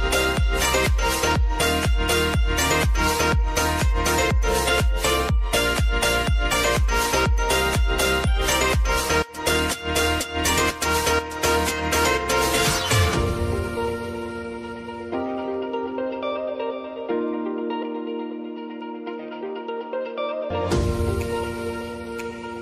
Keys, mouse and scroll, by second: 5.3 space, 9.6 space, 10.2 click, 12.8 s, 13.9 click, 18.3 Return, 19.8-21.6 drag.